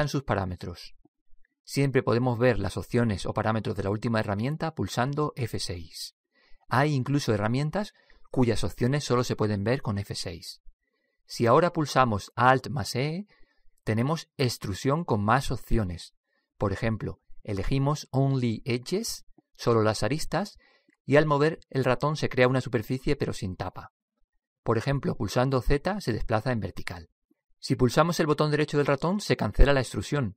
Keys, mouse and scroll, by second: 1.4 click, 5.7 F6, 13.1 alt+e, 30.2-30.3 middle drag.